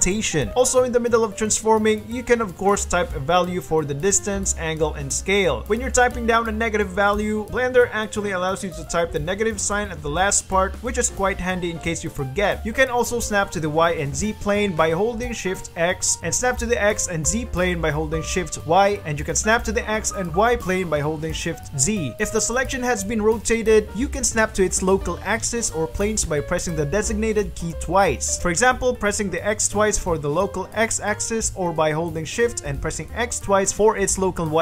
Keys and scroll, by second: 1.0-4.7 typing, 1.4 Return, 2.6 Return, 3.3 Return, 5.3 KP_Subtract, 6.0-7.6 typing, 6.8 KP_Subtract, 7.2 KP_Enter, 7.8 KP_Subtract, 8.3 Return, 9.1 r, 9.1 y, 9.7 KP_3, 9.7 KP_0, 10.1 KP_Subtract, 10.6 Return, 11.4-13.5 typing, 13.1 KP_Subtract, 17.0 shift+y, 20.3 shift+z, 22.3 ctrl+z, 22.6 ctrl+r, 24.2 ctrl+r, 24.4 g, 24.6 z, 25.0 z, 26.5 y, 28.8 x, 29.2 x, 31.4-32.0 shift+x, 34.1 shift+x.